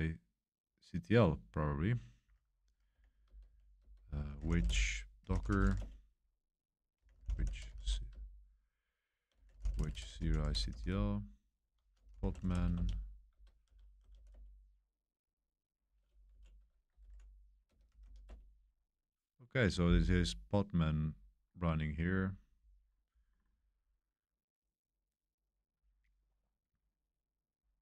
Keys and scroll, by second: 2.9-14.6 typing, 16.3 Up, 16.7-18.5 typing.